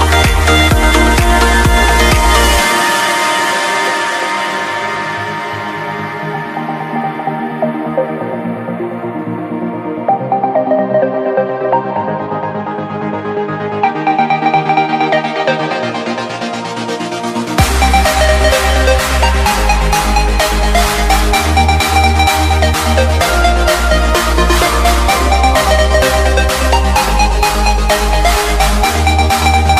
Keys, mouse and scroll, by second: 0.8-4.0 typing, 4.5 click, 5.3 c, 5.5 Tab, 7.6-11.5 typing, 8.3 Tab, 12.2 click, 12.7-14.8 typing, 16.1 BackSpace, 16.8 Left, 17.4-20.1 typing, 17.9 Right, 21.3 click, 21.9 Left, 24.5 alt+Num_Lock, 24.6 alt+scroll up 2, 25.5-26.2 alt+scroll down 3, 26.4 scroll up 2, 27.0 scroll down 1, 27.4 click, 28.4-28.8 scroll up 1, 29.4 click.